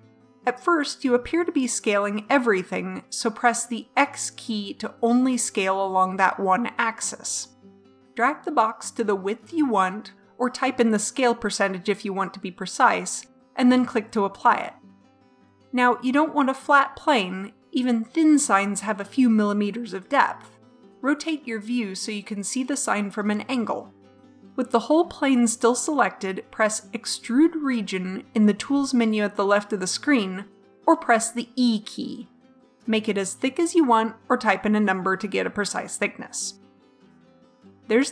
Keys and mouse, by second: 21.1 click, 21.3-22.4 middle drag, 25.5-28.4 drag.